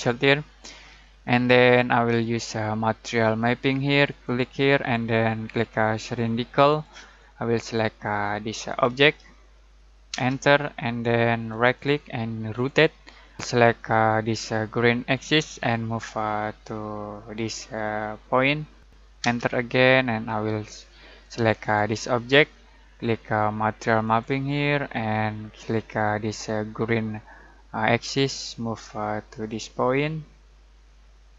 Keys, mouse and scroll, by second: 5.9 click, 6.6 click, 10.1 space, 11.4 right click, 12.5 click, 13.3 space, 15.1 click, 18.9 click, 19.2 space, 21.6 click, 24.0 click, 28.0 click.